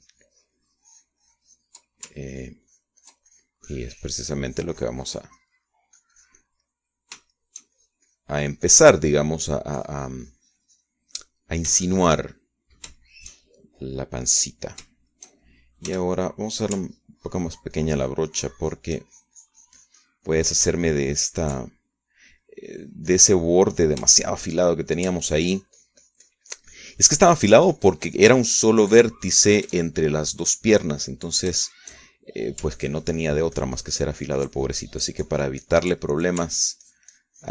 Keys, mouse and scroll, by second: 0.6-3.4 ctrl+drag, 3.9-8.5 ctrl+drag, 8.5-11.1 shift+middle drag, 11.1-13.2 drag, 13.2 shift+middle click, 14.4 shift+middle click, 14.6 shift+middle click, 15.4 right click, 16.1 middle click, 16.2 shift+right click, 16.6-18.1 shift+middle drag, 17.5 f, 18.1 click, 18.3 ctrl+middle click, 18.5-23.8 ctrl+drag, 24.2-26.2 drag, 26.2 shift+click, 26.8-31.3 ctrl+shift+drag, 31.9-33.1 drag, 33.1-34.2 shift+middle drag, 34.4-37.5 ctrl+shift+drag.